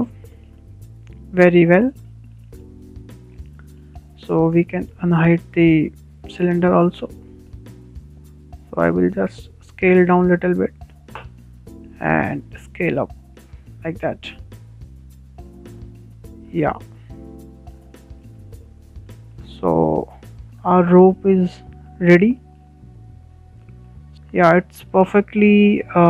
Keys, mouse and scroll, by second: 1.1-1.5 scroll up 2, 1.5-3.2 shift+middle drag, 3.2-3.8 scroll down 4, 3.5 shift+middle drag, 3.8-4.7 shift+middle drag, 4.7-5.0 scroll up 1, 5.0-7.4 shift+middle drag, 7.4 alt+h, 7.5 alt+h, 8.2 scroll down 3, 8.5 middle click, 9.1 click, 10.3 s, 10.5 s, 13.1-14.2 drag, 15.6-16.8 middle drag, 16.8 scroll up 3, 17.0-19.1 shift+middle drag, 19.1 scroll down 2, 19.3-20.0 shift+middle drag, 20.0 click, 20.4-21.7 shift+middle drag, 21.7 scroll up 6, 22.1-23.3 shift+middle drag, 23.3 scroll down 2, 23.6 shift+middle click, 24.1 click, 24.5-24.8 scroll down 3, 24.8-26.0 middle drag.